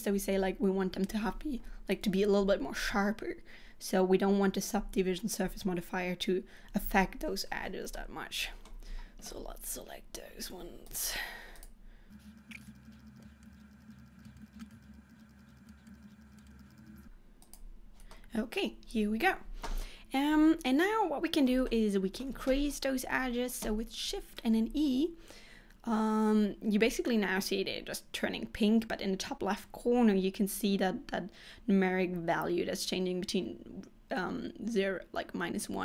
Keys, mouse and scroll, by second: 8.1 middle click, 11.0 alt+shift+click, 11.7 alt+shift+click, 12.1 alt+shift+click, 12.2 alt+shift+click, 12.4 alt+shift+click, 12.5 alt+shift+click, 12.6 middle click, 12.7 shift+click, 12.8-13.2 shift+click, 12.9 shift+click, 13.0 shift+click, 13.2 middle click, 13.5-14.2 shift+click, 13.6 shift+click, 13.7 shift+click, 13.8 shift+click, 14.2 shift+middle click, 14.5 shift+click, 14.6 shift+click, 14.6 middle click, 14.8 shift+click, 14.9-15.6 shift+click, 15.1 shift+click, 15.2 shift+click, 15.3 shift+click, 15.7 middle click, 15.9 shift+click, 16.1 shift+click, 16.2 shift+click, 16.3 shift+click, 16.4 middle click, 16.6-17.0 shift+click, 16.7 shift+click, 16.8 shift+click, 17.6 shift+click, 18.2 middle click, 19.9 middle click, 21.7 shift+middle click, 22.8-23.5 scroll up 2, 24.2 shift+e.